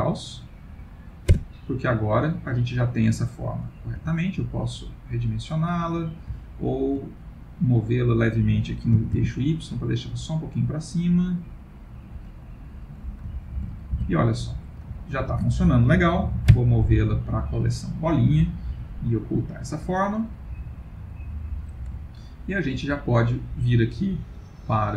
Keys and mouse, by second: 2.2 middle click, 4.0 s, 5.9 middle click, 6.5 ctrl+middle click, 7.2 middle click, 9.0 g, 12.7 middle click, 13.4 ctrl+middle click, 13.6 ctrl+middle click, 14.0 Tab, 15.1 ctrl+middle click, 16.5 m, 19.5 click, 21.3 click, 22.0 ctrl+middle click, 23.0 click.